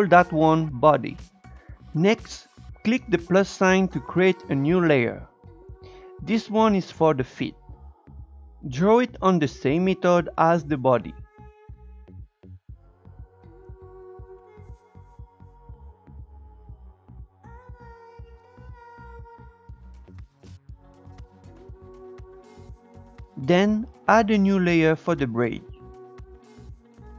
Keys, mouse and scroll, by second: 3.4 click, 4.2-5.1 scroll down 1, 5.1 click, 5.2-6.3 drag, 6.3 e, 7.9 shift+middle click, 8.1 scroll up 2, 8.3 click, 9.4 click, 10.0 scroll up 4, 10.1 click, 10.8 click, 11.2 scroll down 4, 11.3 shift+middle click, 11.4 scroll up 1, 12.0 Tab, 12.2 Tab, 12.3-13.7 drag, 13.7 scroll up 2, 13.9 shift+click, 14.4 scroll down 1, 14.5 click, 15.3 shift+middle click, 15.4 Tab, 15.5 scroll down 3, 15.6 scroll up 1, 16.0 Tab, 16.3-18.5 drag, 18.5 Tab, 18.6 scroll up 1, 18.9 Tab, 19.1 Tab, 19.2-20.3 drag, 20.3 Tab, 20.4 space, 20.6 click, 20.8 ctrl+z, 20.9 ctrl+z, 21.1 space, 21.3 click, 22.0 scroll down 2, 22.1 scroll up 1, 22.3 click, 22.7 scroll down 3, 22.8 shift+middle click, 24.8-27.1 drag.